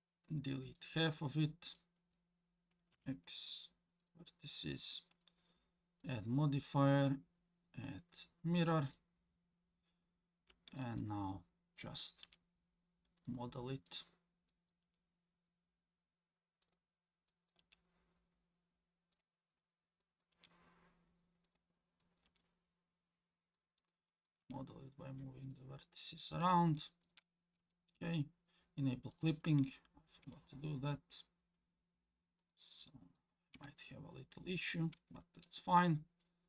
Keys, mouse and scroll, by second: 0.8-1.8 drag, 2.9 x, 6.0-6.7 drag, 6.7-8.9 middle drag, 10.8 click, 12.2 g, 14.5 click, 14.8 g, 17.3 click, 17.6 g, 20.0 click, 20.3 g, 22.0 click, 22.3 g, 24.1 middle click, 24.1 click, 24.4 g, 26.0 click, 26.0 middle click, 26.3 g, 27.7 shift+middle click, 29.1 click, 30.2 g, 33.2 click, 33.5 g.